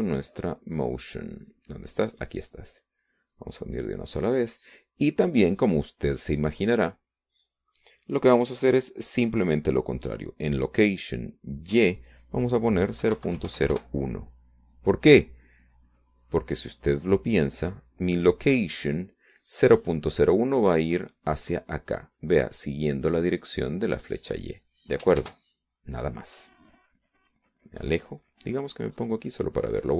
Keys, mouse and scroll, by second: 0.4-1.5 drag, 2.4 click, 5.1 click, 6.4-7.6 drag, 9.2-9.8 drag, 9.9-11.0 middle drag, 14.7 click, 16.1 KP_0, 16.2 KP_Decimal, 16.4 KP_0, 16.6 KP_1, 16.8 KP_Enter, 18.2-19.2 drag, 19.4-19.8 scroll up 2, 20.2-21.7 drag, 25.3-27.6 drag, 28.3 ctrl+z.